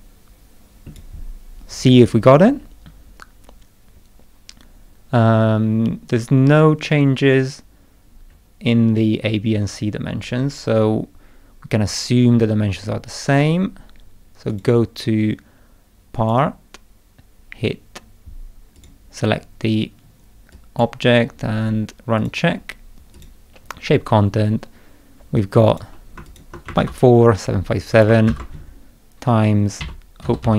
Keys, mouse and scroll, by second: 1.7-2.1 scroll down 2, 2.3-2.8 scroll down 2, 3.9 scroll up 2, 8.3-9.0 scroll down 4, 9.3-9.9 scroll down 4, 10.1-10.5 scroll up 1, 14.5 click, 16.1 click, 18.7 click, 20.5 click, 22.2 click, 23.1 click, 25.4 click, 26.2 shift+click, 26.8 ctrl+c, 27.9 click, 28.3 ctrl+v.